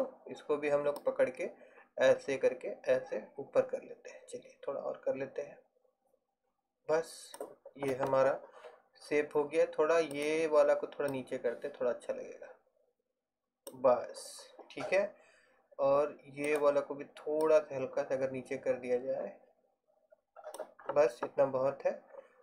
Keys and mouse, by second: 1.1 middle click, 1.6 click, 10.2-11.4 right drag, 11.2 click, 11.4 middle click, 12.3 right click, 16.6 right click, 17.5-18.6 middle drag, 18.6-20.0 right drag.